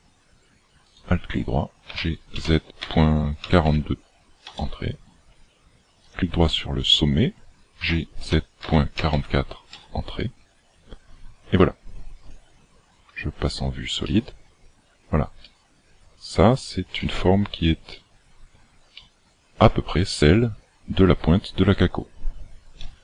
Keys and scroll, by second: 1.8 g, 7.7 g, 22.7 a.